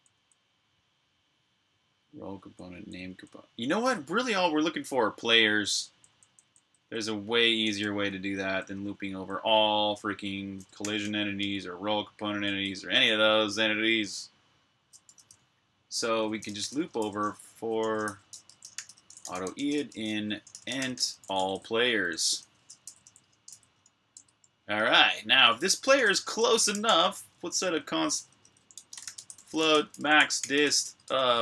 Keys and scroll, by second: 2.5-2.9 typing, 5.4-11.3 typing, 12.4 ⟲, 14.9 o, 16.0-22.2 typing, 24.0 typing, 25.0-31.4 typing.